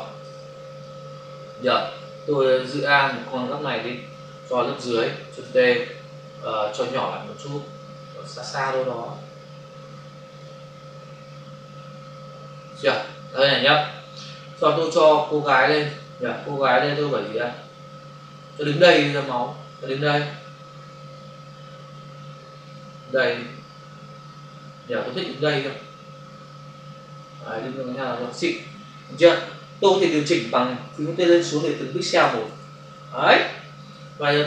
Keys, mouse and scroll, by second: 0.1 Return, 0.8 click, 3.0 alt+click, 5.4 ctrl+t, 6.8 shift+click, 9.7 Return, 10.3 click, 15.3 click, 15.4 click, 15.7 click, 15.8 double click, 16.8 click, 31.8 Left, 32.0 Down, 33.4 Left.